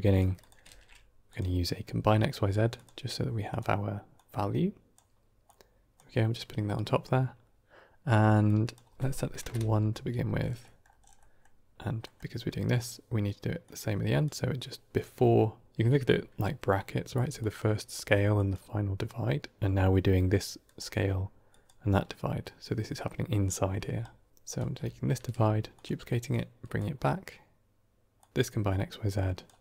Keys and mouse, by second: 0.5 shift+a, 4.2-4.9 drag, 5.3-5.8 drag, 8.5-9.9 drag, 10.7 middle click, 11.1 middle click, 11.9 middle click, 12.5 middle click, 13.5 click, 17.1-18.2 d, 17.3 click, 18.2 click, 18.4 d, 18.5 d, 20.0-21.3 d, 20.5-21.5 drag, 21.5 d, 21.6 d, 21.7 d, 23.8 d, 24.3 d, 24.4 click, 25.0 shift+d, 26.2-26.7 drag, 28.1-29.4 drag.